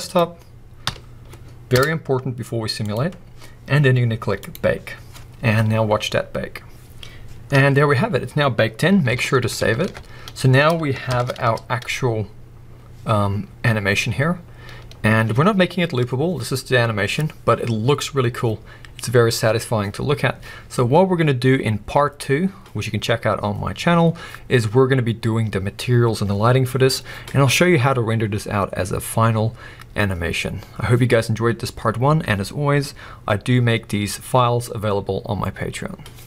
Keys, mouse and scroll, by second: 4.4 click, 8.0-8.4 scroll up 1, 9.5 ctrl+s, 10.0-11.1 scroll down 1, 11.1 shift+Left, 11.4 space, 19.8 click, 24.4 click.